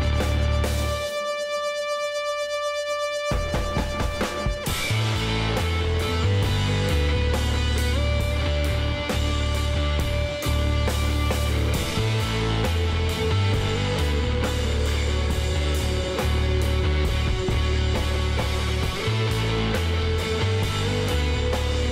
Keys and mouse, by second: 0.5 middle click, 1.6-3.4 drag, 2.7 b, 5.2 x, 6.7 KP_Divide, 7.0-8.9 middle drag, 7.6 Tab, 8.1 a, 10.1-11.9 middle drag, 14.2-21.1 middle drag.